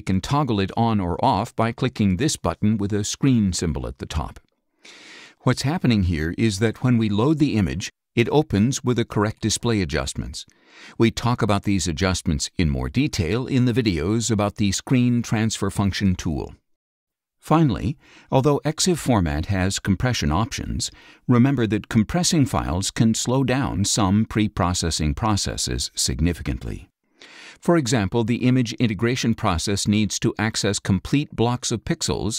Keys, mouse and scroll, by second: 3.7 click, 4.5 click, 5.2 click, 6.2 click, 16.6 click, 19.6 click, 22.0 click.